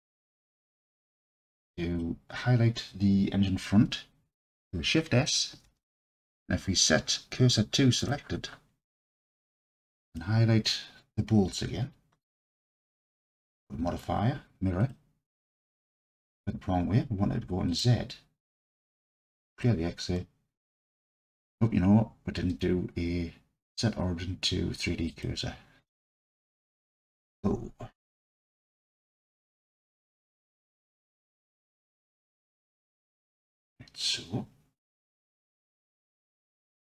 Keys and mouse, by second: 0.9 click, 1.5-2.0 drag, 5.6 shift+s, 12.7-14.9 drag, 17.7 click, 19.4 click, 20.2 middle drag, 28.9 click, 29.4-30.4 alt+middle drag, 30.8-31.2 alt+drag.